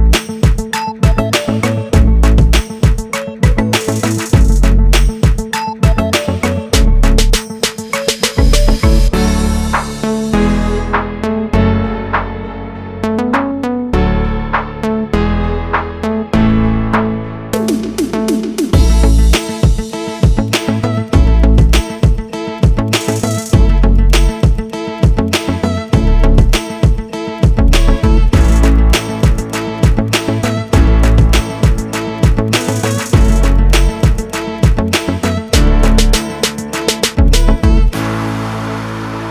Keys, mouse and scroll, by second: 0.7-1.2 scroll up 1, 1.6 click, 2.7 scroll down 1, 2.9 click, 4.7 click, 5.4 click, 5.7 scroll down 1, 6.7-7.2 scroll down 1, 9.4 ctrl+z, 10.8 ctrl+s, 11.5 click, 11.8 double click, 12.7 ctrl+o, 14.8 scroll down 1, 17.0 click, 19.9 click, 20.8 F9, 22.3 click, 22.9 click, 23.9 click, 24.2 double click, 24.7 click, 25.3 ctrl+click, 25.9 click, 27.1 double click, 29.8-30.2 scroll up 1, 30.2 scroll down 1, 31.8-32.6 scroll down 1, 33.4 scroll down 1, 34.0-34.7 scroll down 1, 35.9 click, 36.5 click, 37.8 click, 38.7 F4.